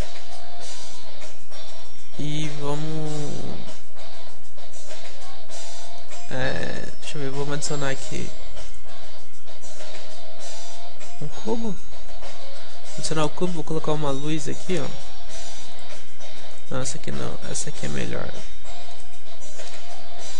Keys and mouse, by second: 1.0-4.2 middle drag, 6.1-9.7 middle drag, 11.6-15.8 middle drag, 12.1 alt+g, 16.5 x, 20.1-20.3 middle drag.